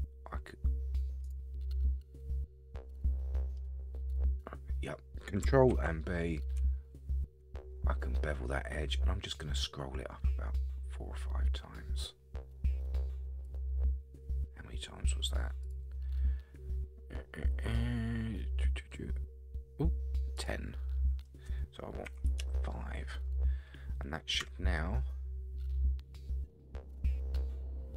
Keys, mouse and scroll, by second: 1.5 scroll down 3, 1.8-3.6 middle drag, 3.8-4.1 scroll down 2, 4.1-4.8 scroll up 7, 5.7 ctrl+b, 15.8 click, 20.4-22.7 drag, 23.9-24.4 scroll down 1, 24.4 Tab, 24.8-27.9 middle drag.